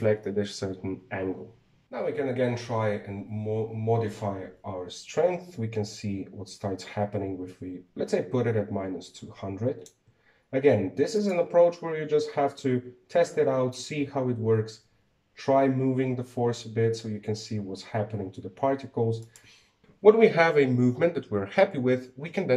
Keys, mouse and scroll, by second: 1.8 click, 2.4-5.4 drag, 11.9 click, 14.8 g.